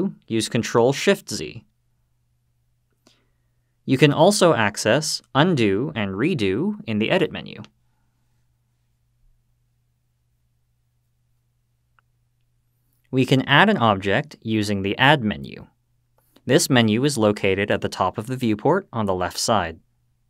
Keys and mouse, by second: 0.7 ctrl+shift+z, 2.0 ctrl+shift+z, 8.9-9.7 drag, 10.5-11.3 drag, 19.1 click.